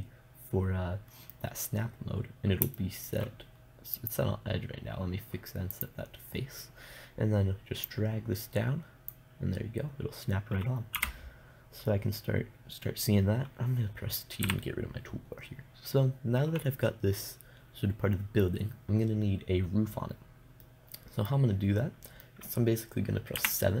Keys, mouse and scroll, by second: 1.4-4.4 middle drag, 4.4-6.2 drag, 7.2-8.3 middle drag, 8.3-11.4 drag, 11.4 KP_0, 14.9 t, 21.1 middle click, 22.0-23.8 middle drag.